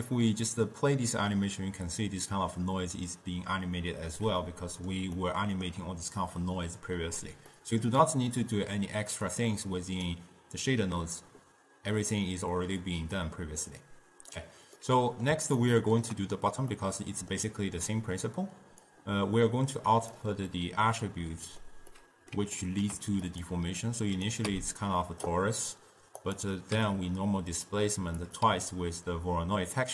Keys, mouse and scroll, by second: 0.1-3.1 drag, 4.5 middle click, 5.3-9.3 ctrl+middle drag, 9.3-12.5 drag, 12.9-15.0 drag, 15.0-18.9 middle drag, 18.9-20.6 drag, 20.6-23.3 middle drag, 23.3 click, 23.9 click, 24.7 m, 26.3 click, 26.9 m, 28.3 click, 28.7 m.